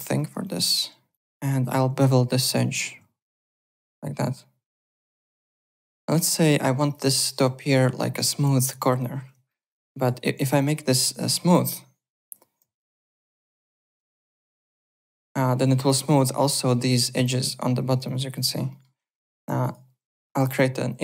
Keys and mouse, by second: 0.0-1.8 typing, 0.1 alt+right click, 0.4 alt+click, 1.1 click, 1.6 click, 2.4 click, 3.6 click, 5.4 w, 5.6 alt+click, 6.0 `, 6.1 click, 6.3 click, 6.8 alt+click, 7.2 alt+click, 8.5 alt+click, 9.4 alt+middle click, 9.7 alt+click, 10.0-11.0 typing, 10.5 click, 11.3 click, 12.1 ., 12.6 ,, 13.0 ., 14.7 click, 14.7 `, 14.9 click, 15.5 F4, 15.8 click, 17.2 alt+click, 18.0 alt+click, 18.7 alt+middle click, 19.0 click, 19.6 click, 20.1-21.0 typing, 20.3 click, 20.8 click.